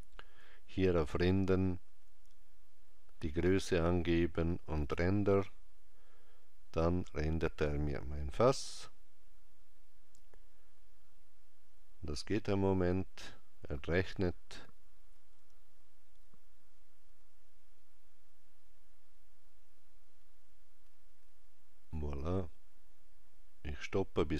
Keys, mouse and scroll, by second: 4.9 click.